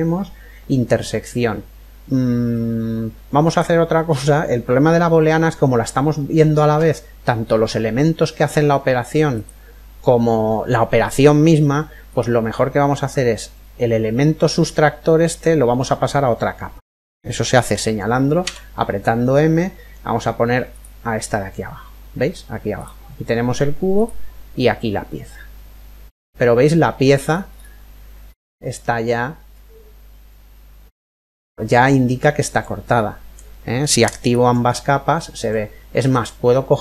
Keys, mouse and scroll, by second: 3.1-4.8 right drag, 4.3-6.2 middle drag, 8.9-10.8 right drag, 11.6-13.5 right drag, 16.2 typing, 18.1 m, 20.7 m, 23.4 click, 24.9-26.7 middle drag, 26.9-27.8 scroll up 1, 27.8-28.4 scroll down 1, 28.4-30.1 middle drag, 33.8 click, 34.3-36.3 middle drag, 35.8-36.8 right drag.